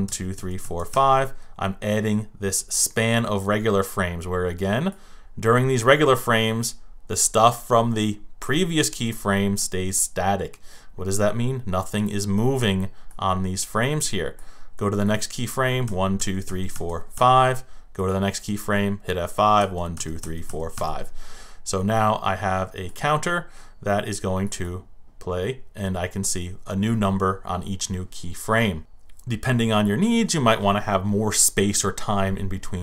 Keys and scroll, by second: 0.0 F5, 15.8 F5, 19.6 F5.